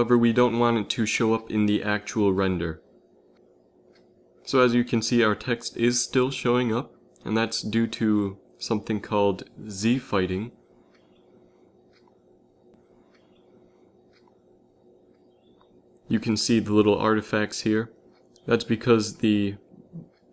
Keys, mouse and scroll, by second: 5.2 shift+z, 8.3-10.4 middle drag, 9.3 z, 9.7 z, 10.4 shift+z, 19.8 z, 20.0 z.